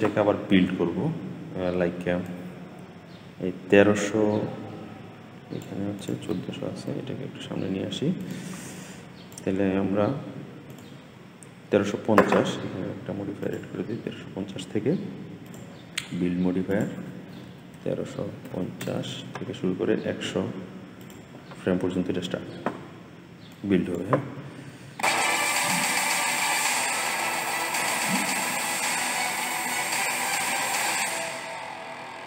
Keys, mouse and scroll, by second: 2.1-5.3 drag, 5.8 click, 6.7 g, 8.7-16.4 drag, 16.6-19.6 drag, 20.9 click, 23.4-24.4 drag, 24.4-24.8 scroll down 5, 24.8 space.